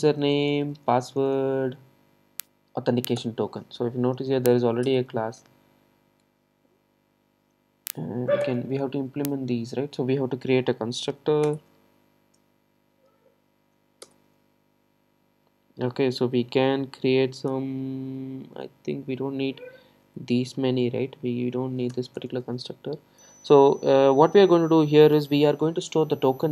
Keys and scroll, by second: 3.3 Return.